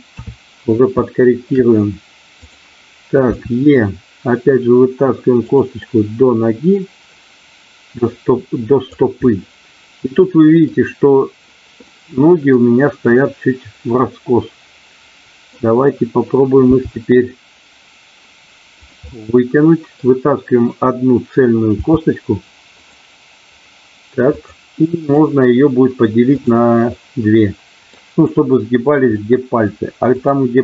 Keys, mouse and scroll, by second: 0.1 KP_3, 1.0 shift+middle click, 2.4 click, 3.3 e, 5.8-7.0 middle drag, 8.0 click, 9.3-10.6 middle drag, 12.0 middle click, 13.9-15.5 middle drag, 16.8 e, 18.8 click, 19.1 middle click, 21.8 g, 22.8 click, 24.4 click, 25.0-26.4 right drag, 26.9-27.9 middle drag, 29.1 middle click, 30.1 click.